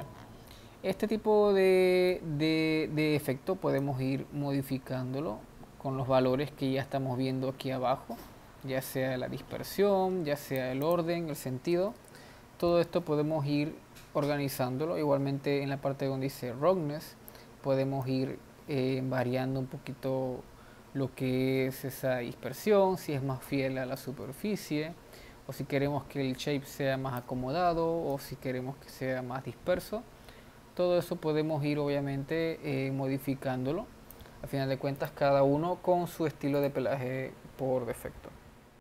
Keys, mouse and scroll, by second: 3.1 scroll down 2, 3.9-7.1 drag, 11.4-15.6 drag, 15.6-16.5 scroll up 1, 16.5-18.0 scroll up 1, 18.0-21.4 drag, 24.0-27.3 drag, 28.1-31.6 drag, 35.0 click, 36.7 click.